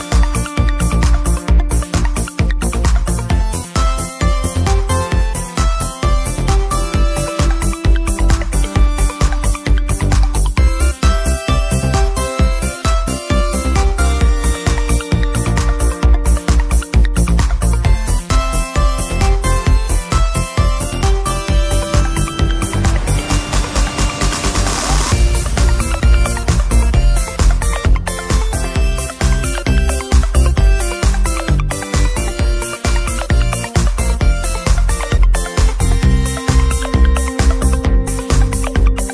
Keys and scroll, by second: 24.6 typing, 25.8-27.3 typing.